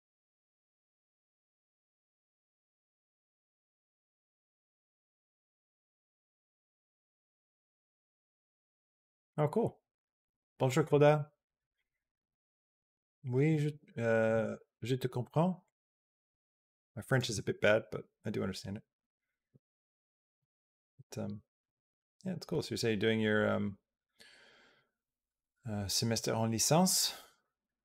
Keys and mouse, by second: 15.5-17.0 drag.